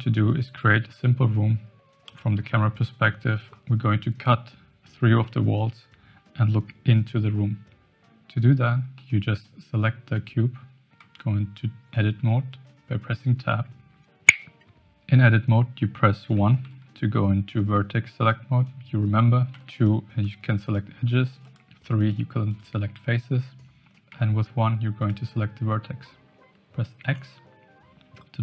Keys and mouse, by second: 2.0 KP_0, 8.9-9.5 middle drag, 11.0 Tab, 16.3 1, 16.6 1, 19.5 2, 19.7 click, 20.3 click, 20.7 click, 21.5 click, 22.0 click, 24.9 click, 27.0 x.